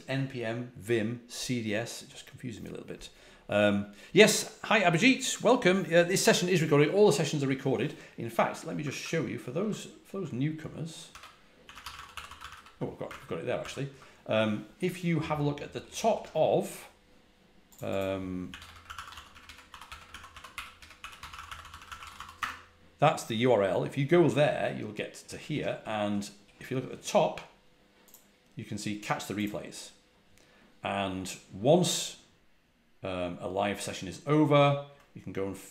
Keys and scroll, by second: 9.4 super+Tab, 11.0 super+t, 11.3-12.8 typing, 13.5 super+w, 18.1-22.5 typing.